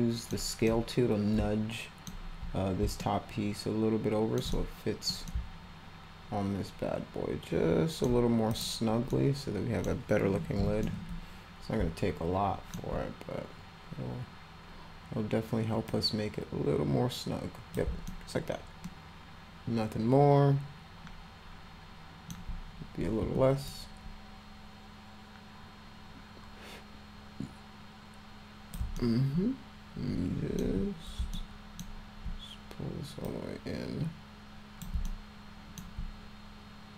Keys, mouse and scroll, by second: 0.7-2.1 middle drag, 3.0-4.4 alt+middle drag, 4.6 middle click, 5.3-8.1 alt+middle drag, 8.5 click, 9.1 middle click, 10.9-12.7 middle drag, 16.0-17.8 drag, 18.1-22.3 alt+middle drag, 23.4 a, 24.2-28.8 drag, 29.0-30.6 alt+middle drag, 31.3 alt+middle click, 33.3-34.9 drag, 35.1 alt+middle click.